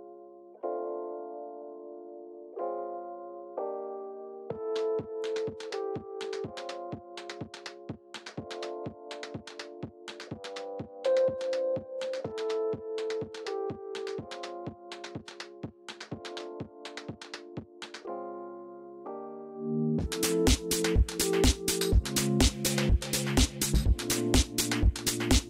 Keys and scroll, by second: 20.2 ctrl+z.